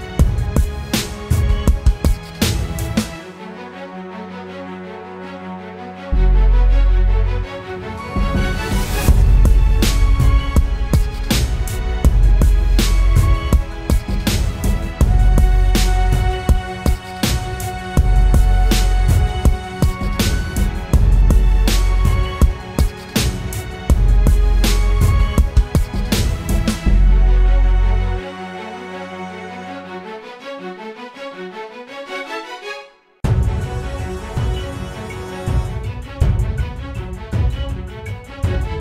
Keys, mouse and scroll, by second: 3.3 ctrl+t, 4.9 alt+shift+click.